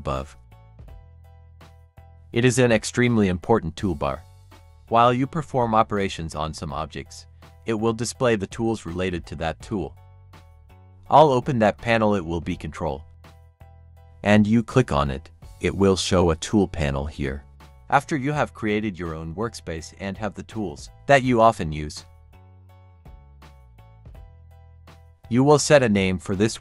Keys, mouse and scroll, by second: 10.9 click, 13.4 click.